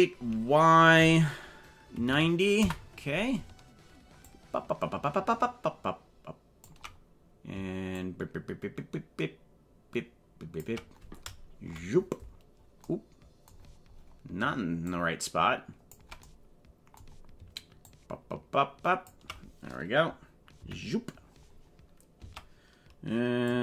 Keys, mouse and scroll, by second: 4.2-6.6 ctrl+drag, 8.0-10.7 ctrl+drag, 11.6 KP_Decimal, 12.4 scroll down 4, 13.6-14.3 scroll down 7, 14.8-15.9 ctrl+drag, 17.8-19.1 ctrl+drag, 20.7 KP_Decimal, 21.0 scroll down 5, 23.5-23.6 drag.